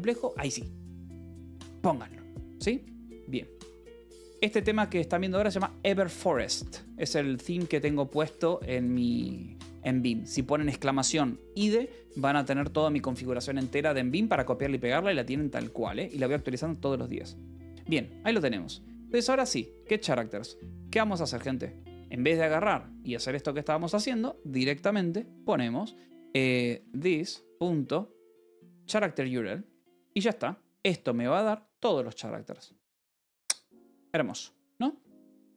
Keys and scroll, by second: 4.4-8.6 typing, 5.6 Escape, 7.5 Escape, 9.7 ctrl+s, 13.1 Escape, 13.5 j, 14.7 k, 15.4 j, 17.3-19.3 typing, 21.2 c, 22.0 i, 23.6 (, 26.6 t, 27.2 ., 29.6 Return, 29.9 Escape, 31.5 ctrl+s, 34.8 k, 35.4 j.